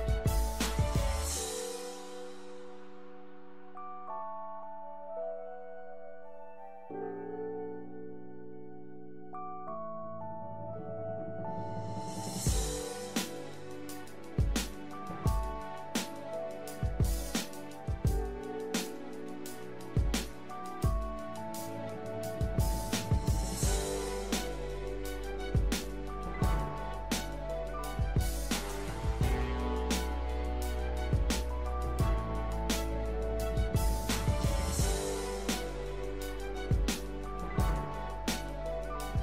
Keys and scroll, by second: 17.3 l, 30.2 l.